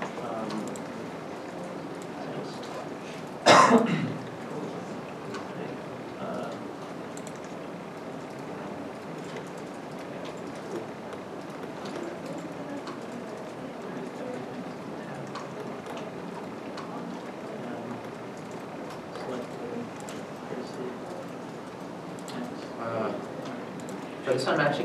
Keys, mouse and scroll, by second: 0.4 middle click, 0.8 g, 1.1 x, 2.2 scroll, 3.3 s, 4.2 shift+z, 5.6 middle click, 6.7 scroll, 6.7-7.3 scroll down 1, 7.3 ctrl+z, 7.4-8.1 scroll up 1, 8.1 middle click, 8.7 scroll up 1, 9.3 middle click, 9.9 g, 9.9 g, 10.6 right click, 11.5 scroll up 1, 12.8 g, 12.9 g, 14.9 g, 16.8 middle click, 16.9-17.6 scroll down 1, 17.6-18.0 scroll down 1, 18.3 middle click, 18.4 x, 19.8 scroll up 1, 21.5 1, 21.5 middle click, 21.9-22.2 shift+scroll, 23.1 middle click, 23.6 shift+middle click, 23.6-24.1 scroll up 1, 24.4 scroll up 1, 24.5 middle click, 24.5-24.8 scroll down 1.